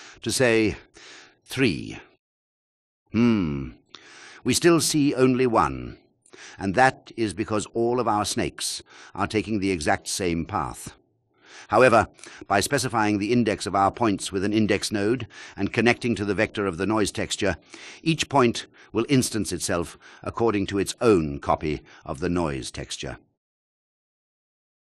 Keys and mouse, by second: 0.3 click, 5.3 click, 6.0 shift+click, 11.1 shift+a, 14.9 click, 20.4 click.